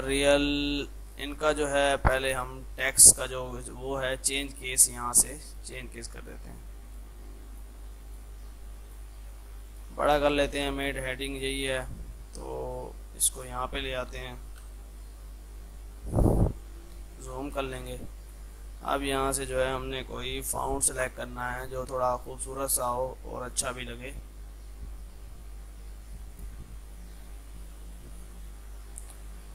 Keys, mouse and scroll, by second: 14.7 shift+Page_Up, 15.5 click, 16.5 F2, 16.6-18.2 drag, 19.1 scroll down 1, 22.3 click, 24.1 scroll down 1, 26.3 click.